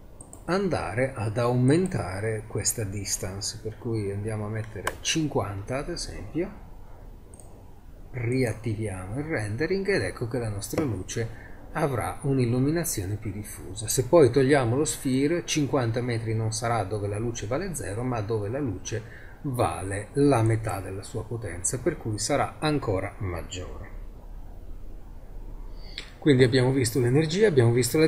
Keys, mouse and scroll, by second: 1.7 click, 3.3 click, 3.4 click, 3.6 middle click, 7.4 click, 9.2 middle click, 9.6-14.3 middle drag, 19.9 middle click, 22.4-24.6 middle drag, 24.6-28.0 middle drag.